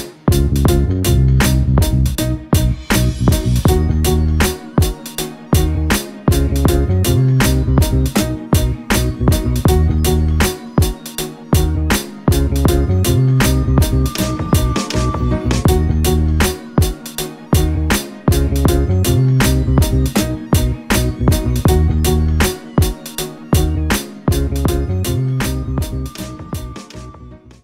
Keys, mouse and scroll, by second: 2.4 alt+click, 3.9 alt+click.